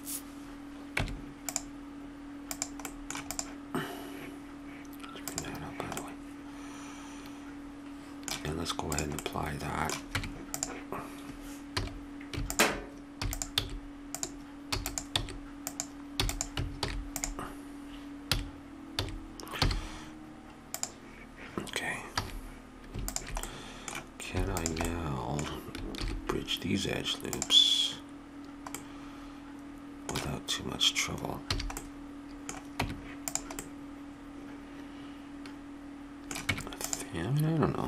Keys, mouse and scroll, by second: 1.0 Tab, 2.5-6.0 drag, 6.0-7.1 middle drag, 8.9-10.1 drag, 10.1 Tab, 11.7 a, 12.5-14.4 drag, 13.2 e, 13.5 s, 14.7 e, 15.2 s, 16.2 e, 16.8 alt+m, 18.3 a, 19.0 a, 19.6 w, 22.2 a, 23.1-26.5 drag, 26.0 ctrl+e, 28.7 click, 31.4 a, 32.8 Tab, 36.3 Tab, 36.5 Tab.